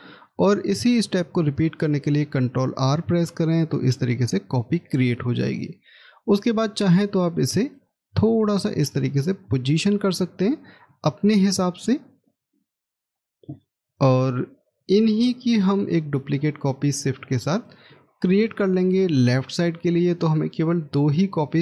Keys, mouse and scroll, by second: 2.0 ctrl+r, 16.4 shift+click, 17.4 shift+click, 18.0 shift+scroll down 1.